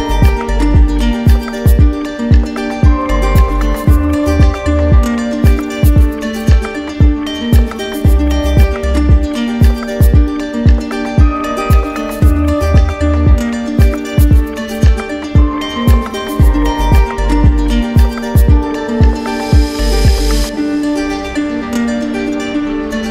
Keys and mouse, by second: 0.5 alt+click, 9.4 click, 13.6 click, 14.9 click, 16.1 click, 16.7 shift+click, 18.6 shift+click, 19.8 click.